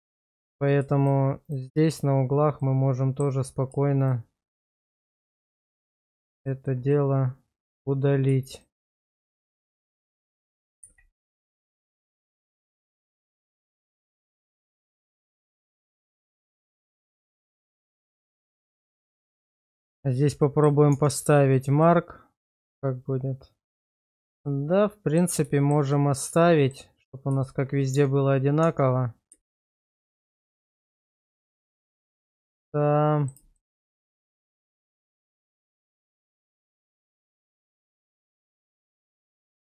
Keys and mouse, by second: 2.6 middle click, 6.0 shift+click, 6.9 middle click, 8.5 shift+click, 9.8 shift+click, 10.8 ctrl+x, 11.6 middle click, 12.0-14.5 middle drag, 15.0 shift+middle click, 16.3 shift+middle click, 17.5 shift+middle click, 19.1 q, 20.4 shift+middle click, 20.9 Tab, 21.8-23.7 middle drag, 24.0 shift+middle drag, 24.4-25.2 middle drag, 25.5 shift+middle click, 25.9 middle click, 27.9 Tab, 28.6 Tab, 29.4 shift+middle click, 30.0-31.0 middle drag, 31.4 Tab, 32.4 middle click, 33.6 shift+middle click, 34.1-36.0 middle drag, 36.6 Tab, 37.2-38.2 middle drag, 38.9 /.